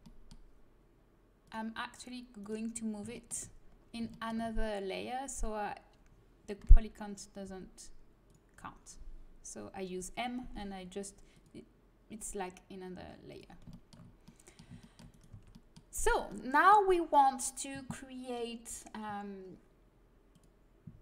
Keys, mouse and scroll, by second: 2.3-4.2 right drag, 3.1 middle click, 4.2-6.6 middle drag, 6.6 m, 7.4 m, 11.3-13.1 drag, 13.2-14.4 drag, 13.6 middle click, 15.3 Tab.